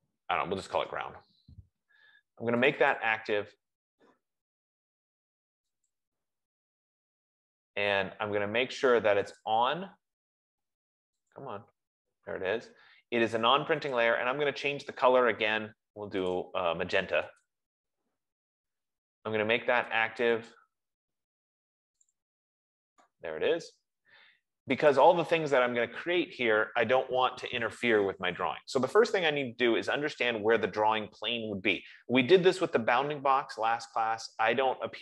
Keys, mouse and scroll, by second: 1.1 Return, 3.0 click, 3.3 click, 6.2 click, 8.2-13.3 drag, 14.3 F15, 14.3 click, 16.6 click, 17.9 click, 20.7 click, 20.9 click, 22.5 click, 22.8 click, 25.5 click, 28.7 click, 30.5-31.3 scroll, 32.1 scroll, 33.3-34.3 scroll.